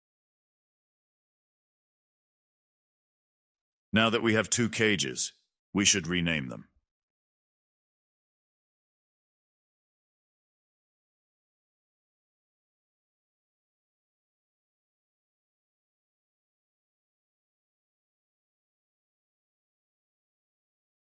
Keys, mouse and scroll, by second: 3.0 click, 3.2-7.4 drag, 7.4-12.0 drag, 14.2 click, 15.3 scroll down 2, 15.9-18.2 drag, 18.2 space, 18.9-21.1 middle drag.